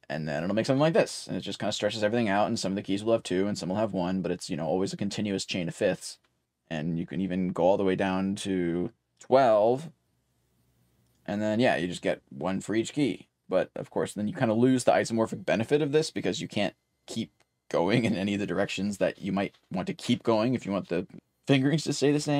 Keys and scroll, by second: 0.0-0.3 typing, 8.8-9.6 typing, 15.2 typing.